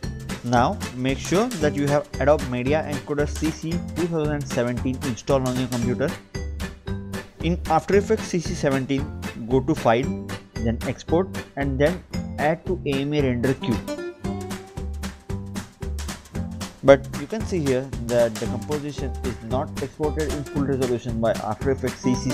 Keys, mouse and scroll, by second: 2.0 click, 2.8 click, 4.2 click, 7.5 click, 7.7 click, 8.3 click, 9.5 click, 13.3 click, 16.7 click, 18.4 click.